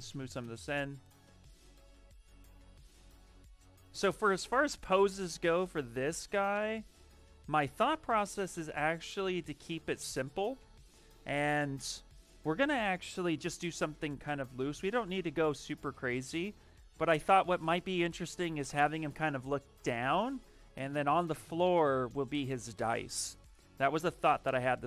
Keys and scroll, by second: 2.6 ctrl+z, 2.8 ctrl+z, 7.6 shift+space, 10.5 ,.